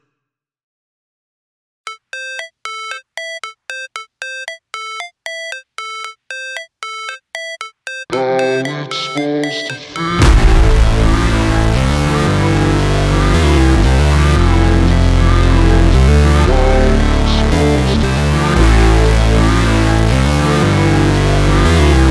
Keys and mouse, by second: 1.1 s, 2.1-3.9 drag, 2.8-4.7 typing, 3.9-22.1 middle drag, 6.1 s, 7.1 KP_1, 7.2 KP_3, 8.2 r, 8.5 g, 12.8 s, 14.2-16.9 typing, 21.2 shift+a.